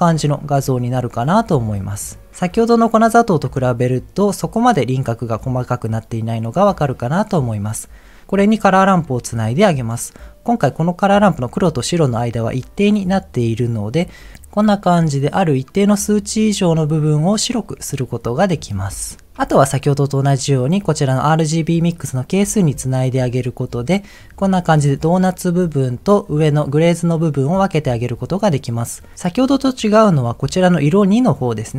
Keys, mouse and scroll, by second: 0.2-0.9 middle drag, 1.0-1.5 scroll up 2, 1.5 middle click, 2.3 scroll up 1, 2.4 scroll down 1, 4.2-5.4 middle drag, 6.6 middle click, 8.8 ctrl+shift+click, 13.0 click, 14.3-18.4 drag, 18.8 ctrl+z, 19.4 ctrl+shift+click, 22.7 ctrl+shift+click.